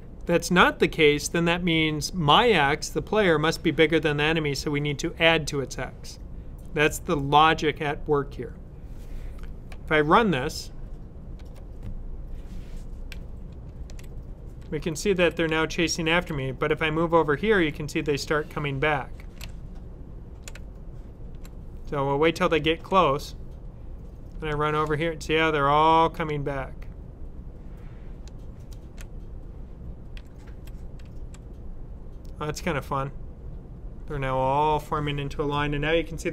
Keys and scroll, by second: 13.0 Up, 24.2 typing, 26.0 typing, 28.0-28.8 typing, 30.0-30.9 typing.